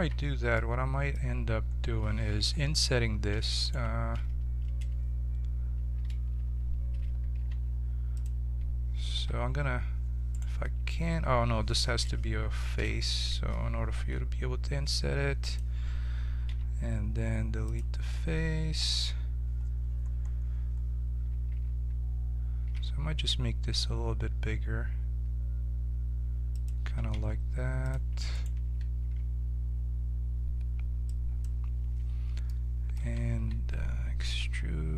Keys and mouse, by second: 2.3 i, 6.0 ctrl+a, 7.4 ctrl+v, 9.1 i, 12.8 f, 13.9 i, 16.5 x, 18.7 KP_7, 21.5 a, 22.6 s, 27.1 ctrl+Tab, 29.0-30.5 drag, 29.0 s, 32.4 middle click, 32.9 a, 33.3 a, 34.3 e.